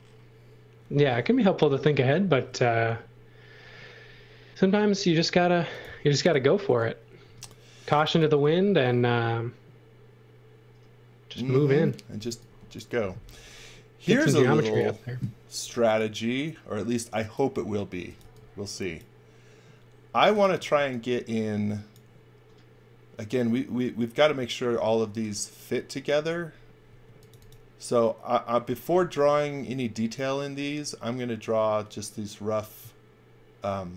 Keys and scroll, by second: 2.3 shift+5, 7.2 space, 7.8 x, 8.1 v, 11.8-14.2 typing, 15.6 m, 17.7-18.7 typing, 20.1-21.3 typing, 26.9 space.